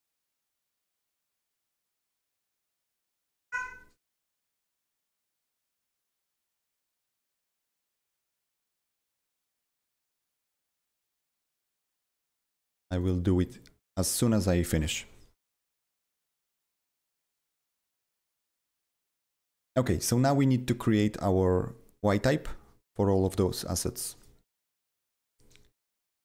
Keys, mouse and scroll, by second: 2.4 click, 3.1 click.